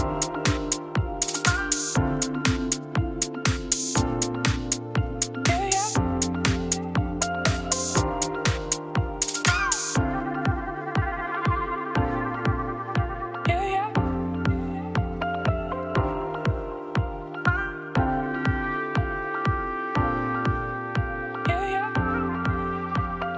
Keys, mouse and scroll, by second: 1.2 ctrl+r, 2.2 Tab, 3.7 click, 4.0 Tab, 4.1 3, 4.5 ctrl+click, 5.2-6.7 drag, 6.7 Tab, 6.9 Tab, 7.8 ctrl+KP_Add, 8.2 ctrl+KP_Subtract, 9.2 ctrl+r, 10.8 click, 11.1 ctrl+Left, 11.3 ctrl+KP_Add, 12.0 click, 12.2 Tab, 12.4-14.5 scroll down 8, 12.6 middle click, 13.0 middle click, 14.5 click, 16.2 click, 17.0 scroll down 1, 17.2-18.2 scroll up 3, 18.2 click, 18.4-18.8 scroll down 1, 18.8-20.8 shift+middle drag, 20.8 click, 21.0 middle click, 21.6-23.3 scroll up 3.